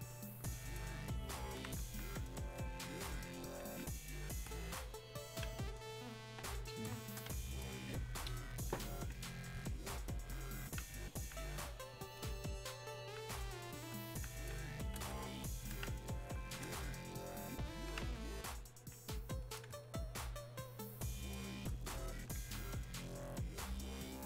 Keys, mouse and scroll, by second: 2.6-11.2 alt+drag, 11.2-16.2 alt+drag, 18.7 alt+click, 19.9-22.8 ctrl+shift+drag, 22.8-24.2 ctrl+drag.